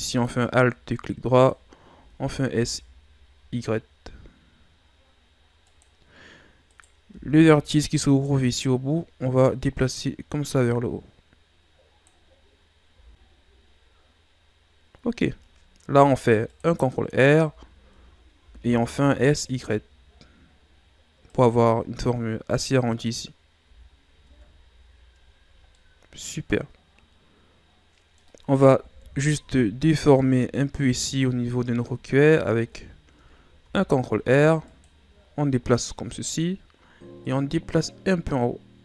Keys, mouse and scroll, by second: 0.4 click, 2.0 s, 6.7 right click, 7.1 b, 8.6-9.4 scroll up 3, 9.4 click, 12.9 z, 13.6-14.3 scroll down 4, 14.3-15.8 scroll up 3, 15.8 ctrl+r, 17.4 z, 18.4 s, 23.6 z, 24.2 Tab, 24.6-25.7 scroll down 7, 25.7-28.7 middle drag, 28.9 KP_1, 29.4 z, 29.9 z, 30.2-30.7 middle drag, 30.7-31.3 scroll up 1, 31.3-32.6 ctrl+scroll down 3, 32.6 Tab, 33.6 ctrl+r, 37.3 click.